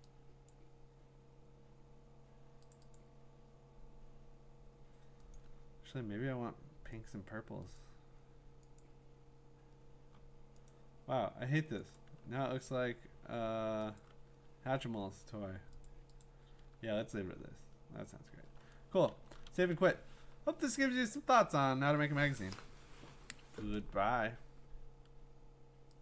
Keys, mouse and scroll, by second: 0.5 click, 2.7 click, 3.0 click, 5.4 click, 7.1 click, 7.8 click, 8.9 click, 10.7 click, 12.0 click, 14.0 click, 15.9 click, 16.2 click, 16.9-17.6 scroll, 18.2 scroll, 19.1 ctrl+shift+s.